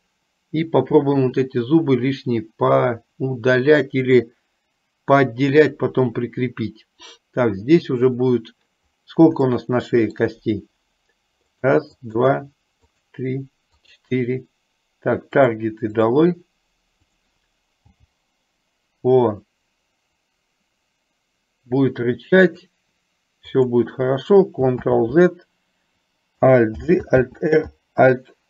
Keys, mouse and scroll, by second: 9.7 shift+middle click, 11.8 click, 12.3 click, 13.1 click, 16.1 click, 18.1 g, 23.7 click, 24.9 ctrl+z, 26.9 alt+g, 27.6 alt+r.